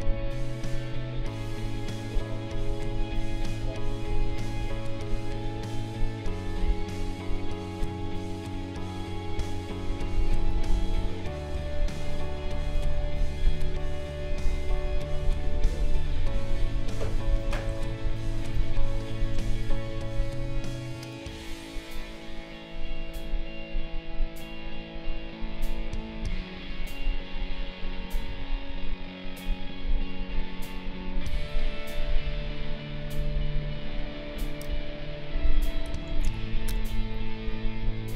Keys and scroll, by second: 9.5 ctrl+-, 11.5 space, 15.2 ctrl+z, 18.5 space, 28.2 q, 32.0 Right, 33.3 Left, 36.1 ctrl+shift+a, 36.7 b.